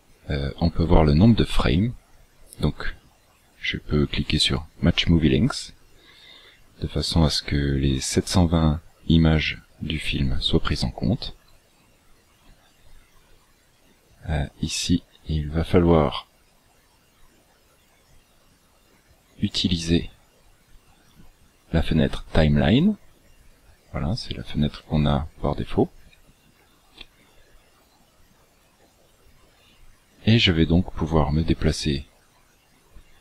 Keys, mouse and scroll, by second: 4.4 click, 16.9 click, 25.1 click, 30.3 click.